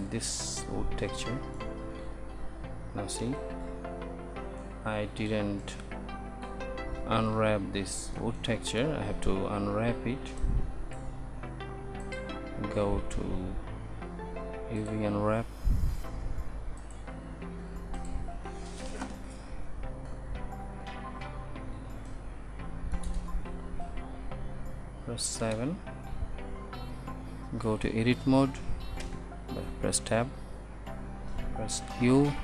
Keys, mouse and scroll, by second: 3.3 shift+z, 29.2 Tab, 32.1 Tab, 32.3 i.